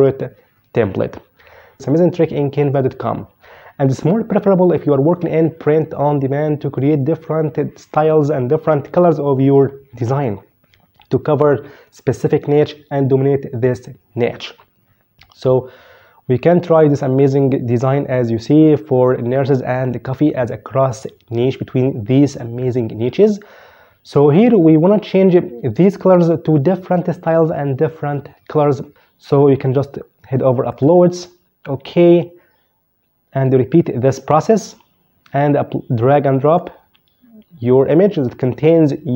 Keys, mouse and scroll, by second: 1.8 click, 16.4 click, 30.4 click, 36.2 click, 37.6 click, 38.9 click.